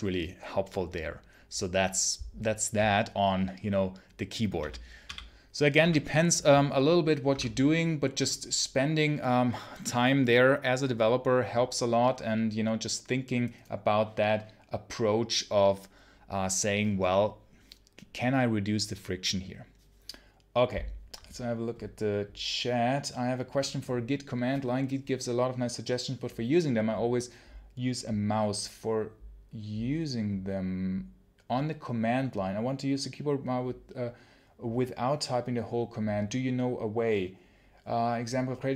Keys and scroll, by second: 4.5 ctrl+super+l, 4.9 ctrl+super+l.